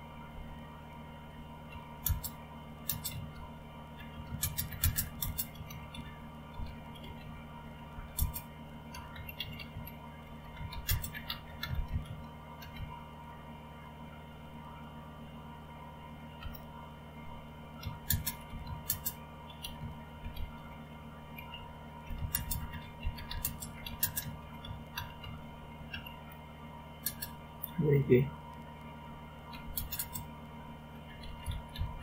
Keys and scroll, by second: 0.3 Return, 2.9-13.2 typing, 16.4 Return, 17.9-25.9 typing, 27.0 typing, 29.2-32.0 typing.